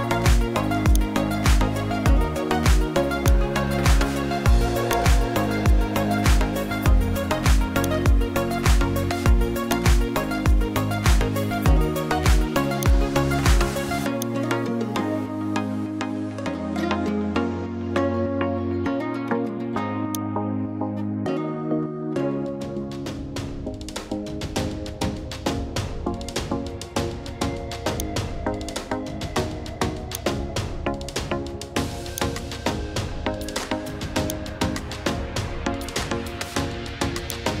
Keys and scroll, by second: 22.0 Caps_Lock.